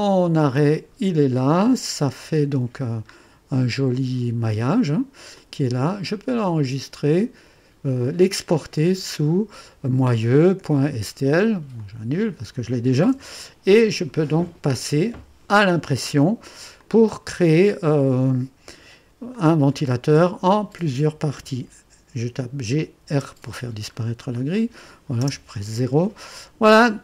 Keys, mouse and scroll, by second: 0.7 click, 2.1 2, 3.1-3.9 scroll up 1, 3.9 click, 5.3 click, 6.5 click, 8.5 click, 11.8 click, 13.1 Delete, 14.3-14.8 scroll down 1, 16.1 Delete, 16.8-18.1 drag, 19.3-21.0 drag, 22.6-23.3 typing, 24.0-24.6 scroll up 1, 24.6-25.1 drag, 25.2 typing.